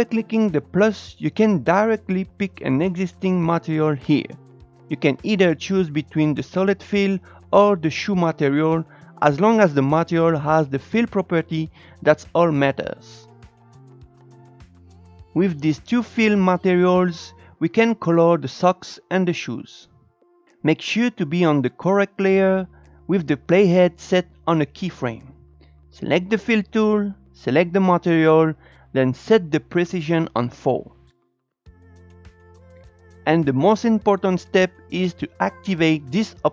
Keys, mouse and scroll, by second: 1.7-8.7 drag, 12.3-14.1 drag, 15.9 click, 16.5 click, 17.3 click, 21.5-24.7 scroll up 1, 25.0-28.5 drag, 29.7-32.0 drag.